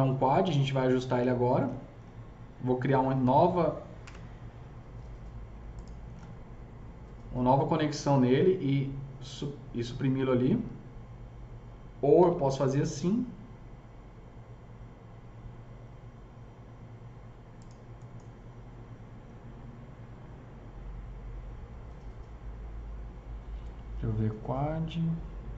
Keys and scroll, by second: 4.0 KP_0, 12.2 alt+c.